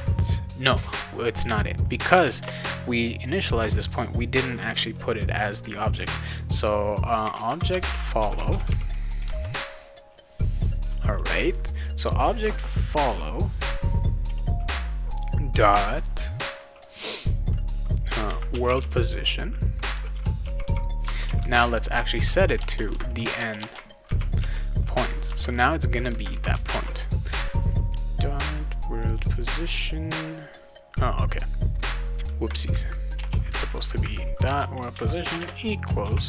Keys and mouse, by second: 1.9 click, 2.1 Return, 2.4 Return, 7.0-9.2 typing, 9.4 Return, 18.3-24.0 typing, 21.0 Return, 25.3 Return, 26.3 ;, 26.7 ctrl+s, 31.7 click, 31.9 space, 32.0 BackSpace, 34.5 BackSpace, 34.9 space, 35.2 =, 35.4 space, 36.0 ctrl+s.